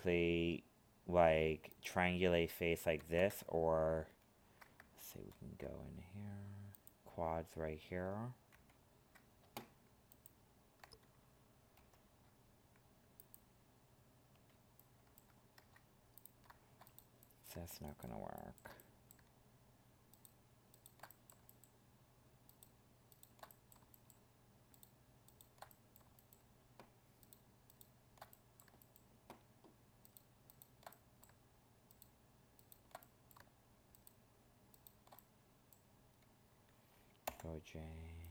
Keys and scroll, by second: 3.0 ctrl+z, 5.1 ctrl+f, 8.5 ctrl+s, 11.7 ctrl+f, 15.5 ctrl+Tab.